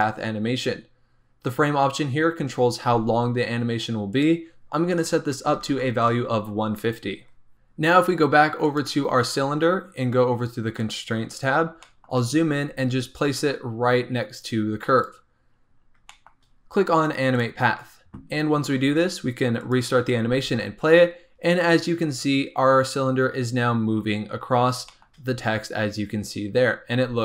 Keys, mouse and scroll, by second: 0.3-2.5 scroll down 4, 4.1-7.1 drag, 8.6 click, 10.8 click, 11.3-11.8 scroll up 3, 11.8 shift+middle click, 12.0-12.6 shift+scroll up 6, 12.6 g, 15.5-15.8 scroll down 7, 16.0 shift+middle click, 16.4-17.3 scroll down 4, 17.3 click, 18.2 scroll up 3, 19.5 click, 20.2 space, 24.5 scroll down 2, 24.8 shift+middle click, 25.2-27.0 scroll up 1, 27.0 space.